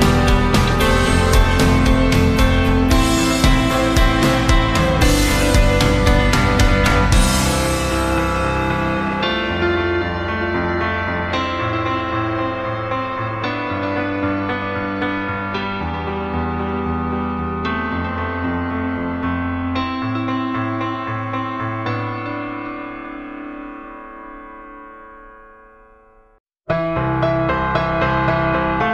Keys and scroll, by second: 0.8 d, 15.4 d.